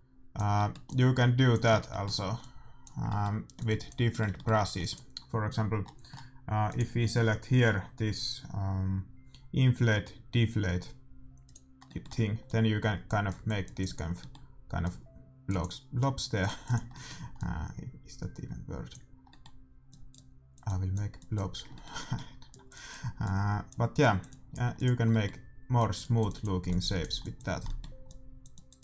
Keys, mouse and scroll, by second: 4.4-6.6 drag, 4.4-6.6 middle drag, 11.8-13.8 middle drag, 12.4-19.1 drag, 14.1-18.8 middle drag, 19.3-24.5 middle drag, 19.8-28.8 drag, 25.0-26.9 middle drag, 27.6-28.8 middle drag.